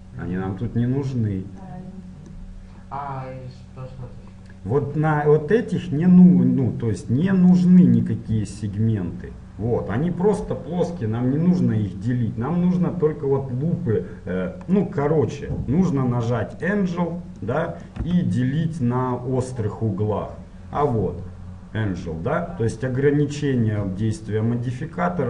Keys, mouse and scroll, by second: 1.9-7.8 middle drag, 7.8-15.0 drag, 15.0-16.7 middle drag, 16.7-25.2 drag, 18.3 z.